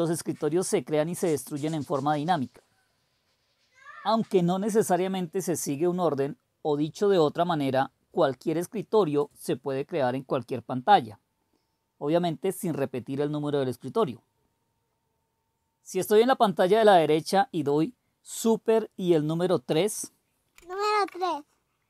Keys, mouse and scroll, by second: 20.5 super+3.